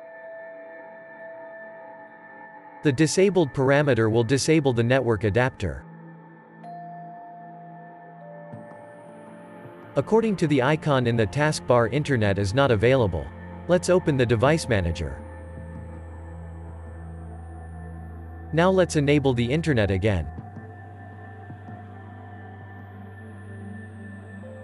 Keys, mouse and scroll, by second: 15.7 click.